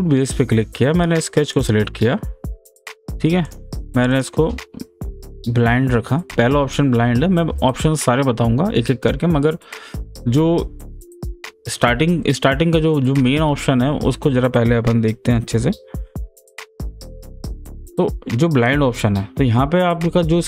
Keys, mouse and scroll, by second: 1.5 click.